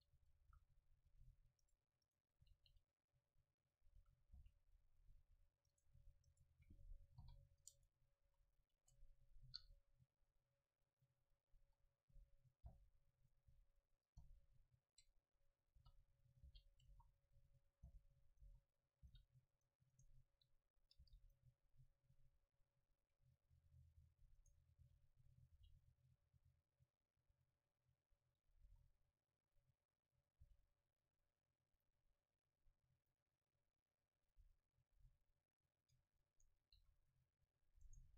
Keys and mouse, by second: 0.5 a, 1.3 c, 1.8-3.8 right drag, 2.5 r, 4.1-5.7 drag, 4.1 a, 4.4 c, 6.0-7.8 drag, 6.4-7.8 right drag, 7.3 ctrl+j, 7.8 Tab, 8.3 a, 8.5 a, 8.9 Tab, 9.7 KP_Divide, 11.7 KP_7, 12.7 g, 13.4-16.0 drag, 13.6 r, 14.4 KP_0, 15.8-19.2 typing, 16.5-17.8 drag, 19.4 click, 21.3 Delete, 21.7 click, 24.5 right click, 24.9 r, 25.6 g, 25.7 right click, 26.9-28.7 drag, 28.7 s, 30.3-33.8 drag, 30.5 r, 33.8-35.0 middle drag, 35.0 s, 35.9-37.9 drag, 36.1 Tab, 36.4 Tab, 36.8 a, 37.9-38.1 right drag.